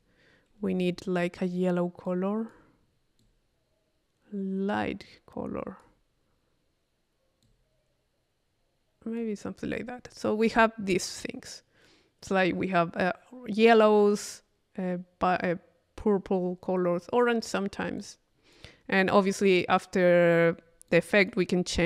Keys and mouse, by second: 2.1 click, 3.2-6.2 drag, 7.4-9.5 drag, 10.1 click, 11.1 click, 18.0-19.1 drag.